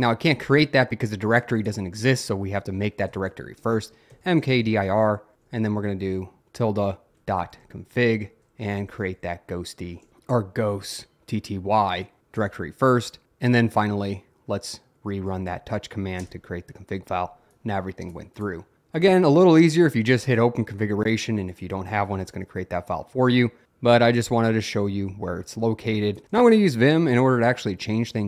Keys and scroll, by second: 2.9-5.7 typing, 6.8-10.6 typing, 12.5 Return, 15.3 Up, 15.4 Up, 16.2 Return, 26.1-28.2 typing.